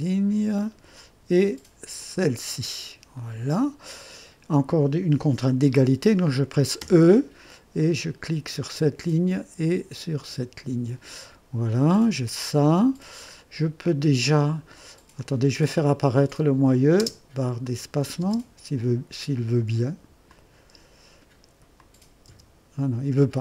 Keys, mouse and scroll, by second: 0.6 click, 2.0 click, 3.2 right click, 6.8 e, 8.6 click, 10.2 click, 12.0 scroll up 1, 13.1 scroll down 1, 15.1 click, 16.3 click, 17.0-18.2 typing, 17.6 click, 20.3 click, 21.8 click, 22.3 typing.